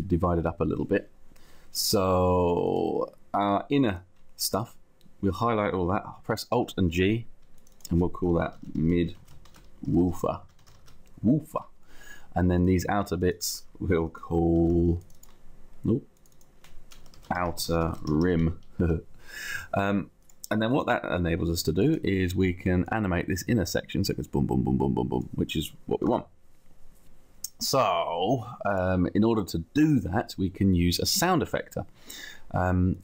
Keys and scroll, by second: 6.5 alt+g, 8.1-11.0 typing, 14.6 alt+g, 16.8-18.2 typing, 18.8 Return, 19.6 Return, 25.8 ctrl+z.